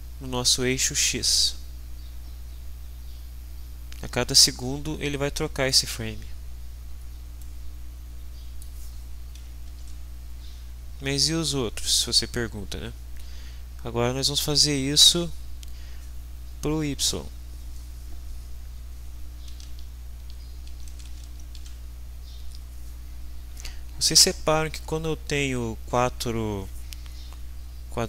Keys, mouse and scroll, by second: 7.6-8.9 middle drag, 9.7 ctrl+s, 19.7 alt+Tab.